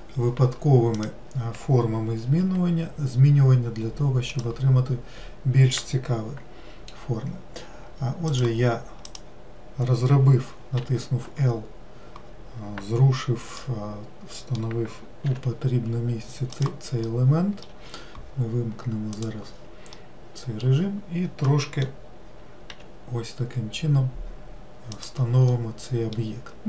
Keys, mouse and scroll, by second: 1.4 click, 2.9 g, 8.8 click, 9.6 click, 11.3 l, 14.1-15.8 middle drag, 15.8 g, 17.5-19.7 middle drag, 19.7 click, 20.5-23.2 middle drag, 23.2 g, 26.0-26.6 middle drag.